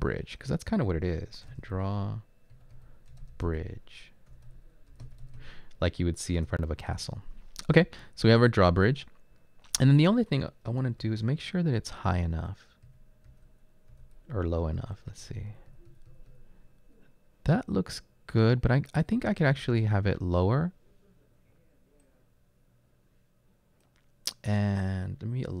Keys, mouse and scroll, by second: 1.5-6.0 typing, 6.3 Return, 7.7 Return, 10.0-11.9 typing, 20.8-21.5 typing.